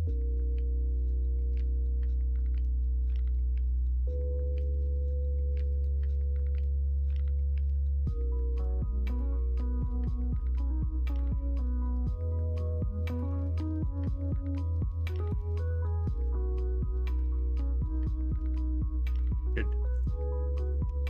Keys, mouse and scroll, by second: 9.3-13.6 middle drag, 14.2 KP_1, 14.6 KP_3, 16.2 g, 19.1 x, 20.8 Tab.